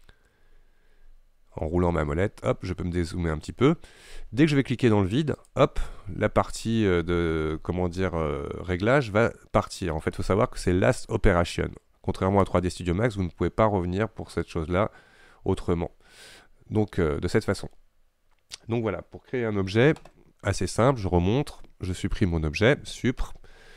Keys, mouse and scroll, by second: 0.4-0.8 scroll down 5, 0.8 scroll up 4, 1.0 scroll down 3, 1.3-1.6 scroll up 3, 1.6-2.0 scroll down 5, 2.0 scroll up 2, 2.3 scroll down 1, 2.4-2.8 scroll up 1, 5.5 click, 12.5 click, 22.3 Delete.